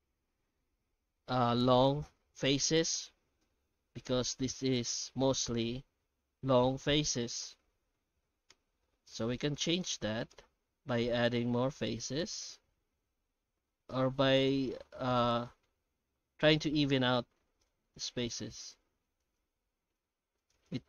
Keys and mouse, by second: 2.6 ctrl+z, 3.0 Tab, 3.4 alt+shift+z, 3.8 shift+middle click, 7.5 Tab, 8.1 shift+h, 8.5 Tab, 8.9 alt+middle click, 9.6 shift+middle click, 10.1 alt+a, 10.5 ctrl+r, 13.0 ctrl+r, 14.9 middle click, 15.5 shift+middle click, 16.0 ctrl+r, 18.0 ctrl+r, 19.7 ctrl+r.